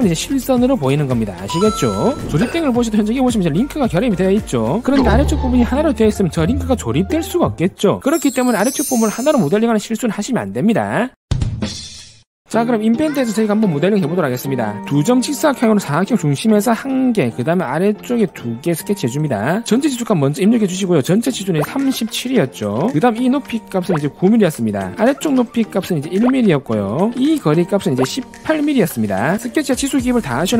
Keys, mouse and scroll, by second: 15.2 click, 15.7 3, 16.7 click, 17.7 click, 18.5 click, 19.6 click, 19.8 d, 20.1 click, 21.1 click, 21.5 click, 22.3 3, 23.2 d, 23.5 click, 23.9 click, 25.8 click, 26.2 click, 26.5 1, 27.6 click, 27.9 click, 28.5 1.